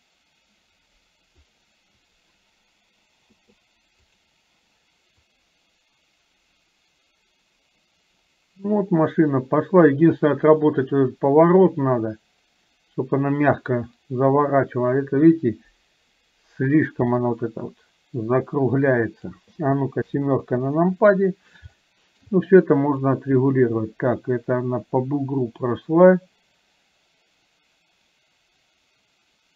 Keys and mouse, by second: 5.6-19.6 drag, 20.2 KP_7, 21.8 shift+middle click, 23.3-29.5 drag.